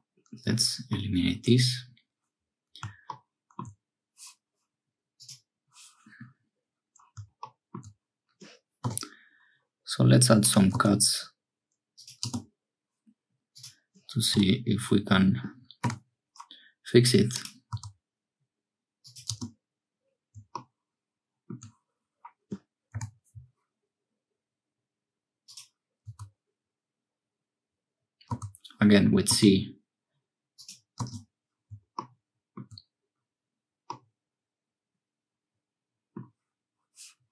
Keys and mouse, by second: 1.4 1, 33.9-36.2 drag.